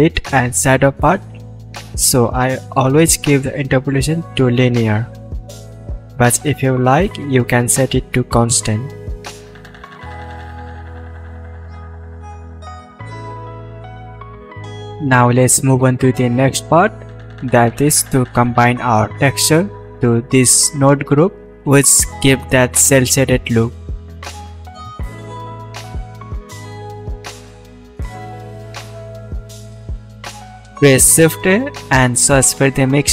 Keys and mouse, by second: 27.4 shift+a, 33.0-33.1 middle drag.